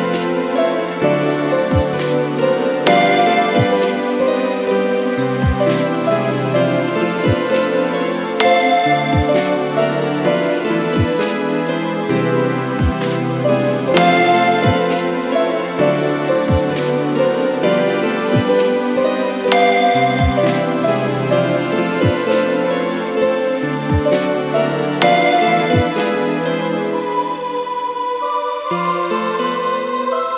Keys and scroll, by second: 0.9 Return, 11.5 Delete, 12.4 ctrl+z, 14.6 Delete.